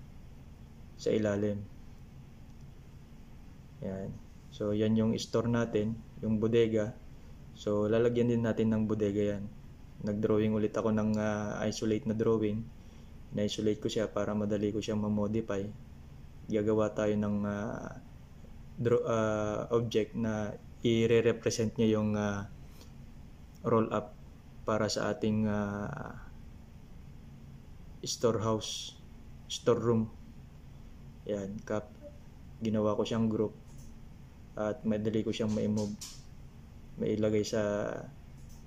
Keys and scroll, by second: 25.4 ctrl+c.